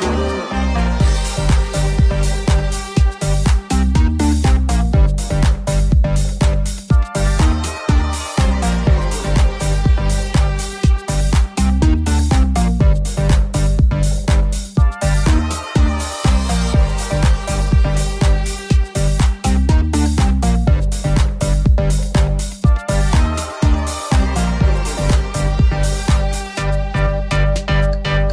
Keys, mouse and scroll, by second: 3.2 alt+z, 3.4 s, 10.1 ctrl+click, 11.1 KP_1, 12.5-28.3 drag, 16.4 /, 19.5 KP_7, 20.7 middle click, 20.7 right click, 22.6 shift+middle click, 22.6 shift+right click, 23.8 shift+middle click, 23.8 shift+right click.